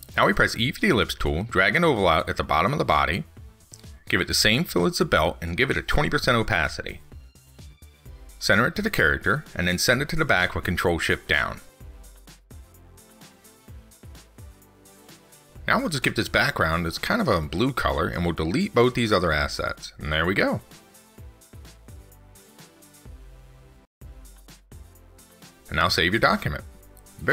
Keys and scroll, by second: 12.3 ctrl+shift+Down.